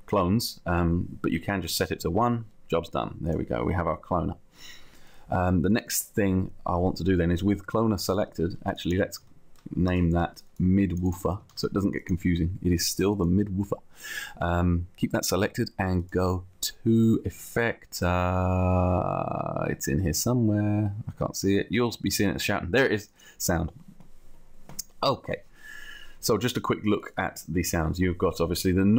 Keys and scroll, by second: 1.9 Down, 3.0 Down, 9.8 ctrl+c, 13.6 ctrl+v.